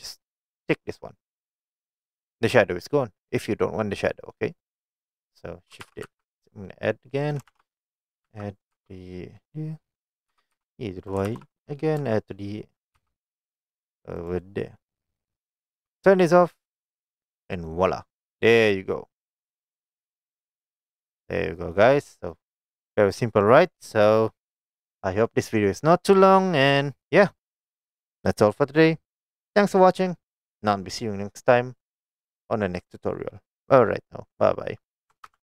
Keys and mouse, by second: 1.7 click, 4.7 click, 5.9 shift+d, 6.1 x, 7.4 shift+click, 7.6 shift+d, 8.3 x, 8.8 g, 10.1 click, 10.4-13.0 typing, 11.2 shift+click, 14.2 click, 14.8-15.4 middle drag, 16.9 click, 17.5 middle drag, 18.7-19.3 middle drag, 19.8 click, 20.8-21.8 middle drag, 22.4-22.7 middle drag.